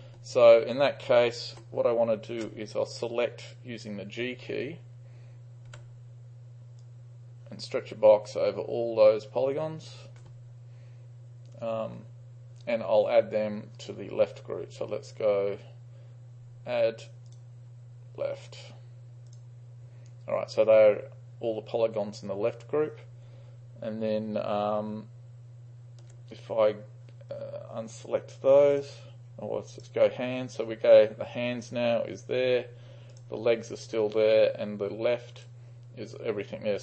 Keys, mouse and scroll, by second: 0.7 click, 1.1 click, 1.3 ctrl+click, 1.8-2.6 drag, 2.7-4.8 drag, 5.7 g, 6.9-9.9 drag, 17.3-18.0 drag, 19.3-21.8 drag, 28.8 click, 29.9 click, 33.2-36.5 drag.